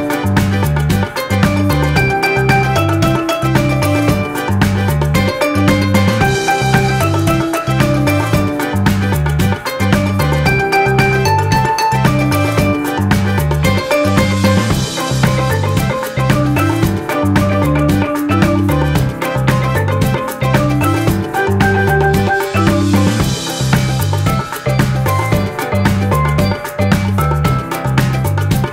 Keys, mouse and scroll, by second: 21.1 z, 28.4 ctrl+-.